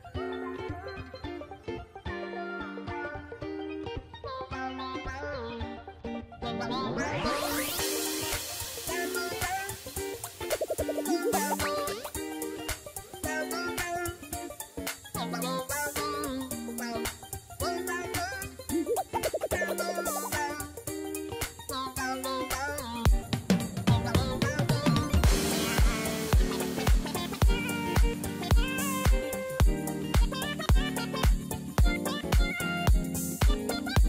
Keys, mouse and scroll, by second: 10.6 ctrl+t, 12.1 alt+click, 19.2 alt+click.